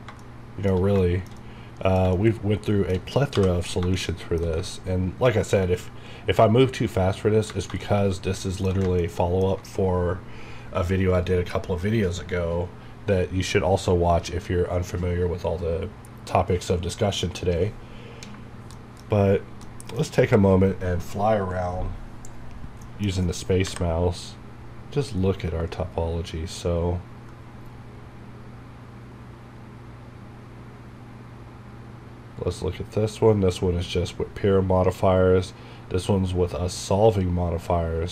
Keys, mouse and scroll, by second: 0.2 shift+middle click, 1.0 shift+middle click, 3.4 n, 4.0 shift+middle click, 9.0 ctrl+middle click, 18.3 alt+space, 18.8 middle click, 19.1 scroll up 1, 19.4 scroll, 19.5 scroll down 1, 19.7-22.4 middle drag, 22.7 scroll down 1, 22.9 middle click, 23.6 KP_Add, 23.7 KP_5.